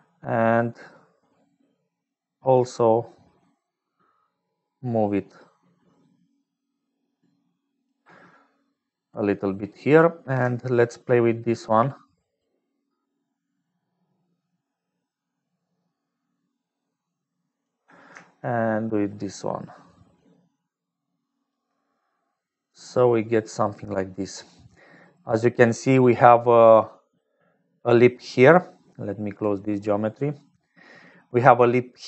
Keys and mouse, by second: 1.5-8.0 shift+right drag, 11.2-17.7 shift+drag, 19.0-21.5 shift+drag, 22.1-23.6 drag, 24.5-25.7 drag, 26.6 click, 27.2 middle click, 31.5 click, 31.7 middle click, 31.7 click.